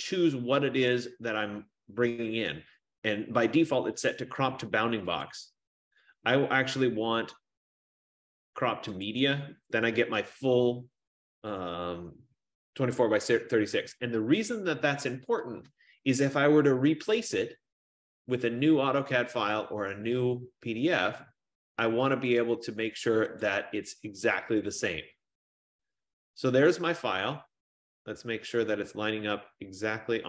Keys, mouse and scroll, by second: 5.7 click, 9.3 click, 13.9 F15, 15.6 click, 19.1-20.6 drag, 23.6-27.9 drag.